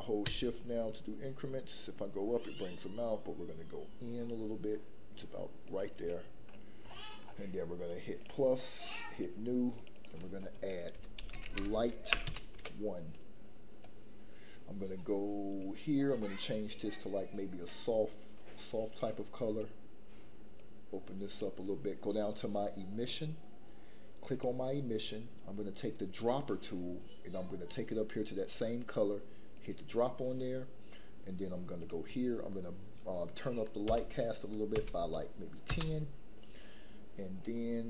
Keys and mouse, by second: 8.2 click, 9.7-12.6 drag, 20.5 click, 24.3 click, 31.9 click.